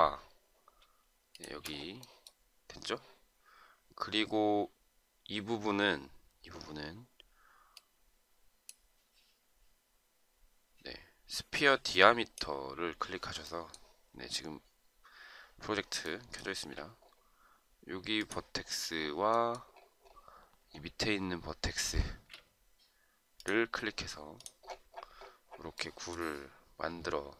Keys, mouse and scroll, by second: 1.4 shift+click, 21.7 shift+scroll up 1.